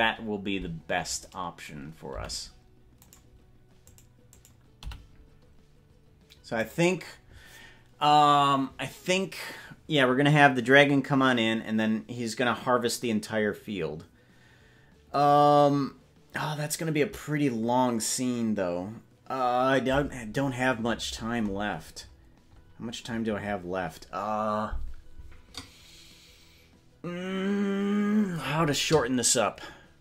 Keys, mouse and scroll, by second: 0.7-1.5 scroll up 10, 2.3 g, 3.9 right click, 4.9 g, 20.9 scroll up 2, 21.1-21.7 scroll down 10, 21.5 scroll up 1, 21.7-23.1 scroll down 15, 22.9 scroll up 2, 23.3 scroll down 1.